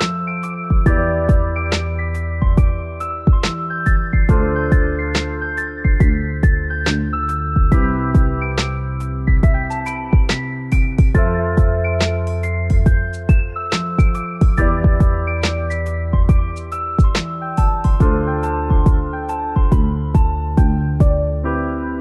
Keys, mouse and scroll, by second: 0.8 scroll up 1, 2.3 scroll down 1, 4.7 scroll down 1, 5.6 middle click, 16.7 shift+middle click, 18.1 Tab, 20.1 middle click, 20.4-20.7 scroll up 1.